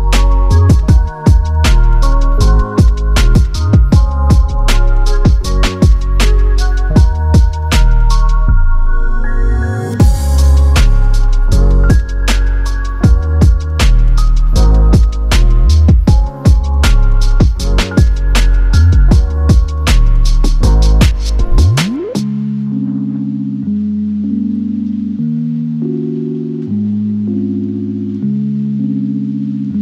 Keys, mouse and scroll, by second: 0.0-1.5 typing, 0.1-0.7 scroll up 10, 1.4 Return, 1.7 middle click, 2.1-2.8 scroll up 10, 2.3 middle click, 2.8-3.1 scroll down 12, 3.1 middle click, 3.4-4.7 typing, 4.5 Return, 5.0 scroll up 11, 5.2 middle click, 5.5 double click, 5.7 right click, 6.4-6.7 scroll up 3, 6.7-8.6 typing, 7.0 double click, 7.5-8.1 scroll up 1, 13.0 typing, 13.9-15.0 scroll up 10, 14.1 typing, 15.0 middle click, 15.6-16.4 typing, 16.2 scroll down 1, 17.4 middle click, 17.6-18.0 scroll down 2, 18.0 typing, 19.9 scroll down 5, 20.0 middle click, 20.3 middle click, 20.5 space, 20.6 double click, 20.8 shift+click, 21.9 middle click, 22.1 Escape, 22.2 space, 22.7-23.2 scroll up 4, 23.2 double click, 23.6-24.3 scroll down 5, 24.3-25.0 scroll up 1, 25.0 scroll up 4, 25.0-25.6 scroll down 12, 25.6 Escape, 25.8 Escape, 26.1 middle click, 26.3-27.1 scroll up 5, 27.2 double click, 28.4 scroll down 2, 29.3-29.8 scroll down 8.